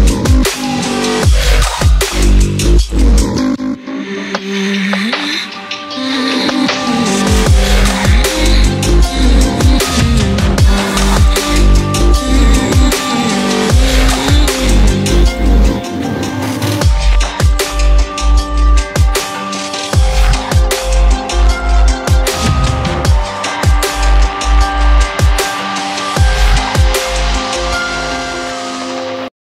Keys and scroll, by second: 2.9 ctrl+=, 20.0 ], 27.7 ctrl+-.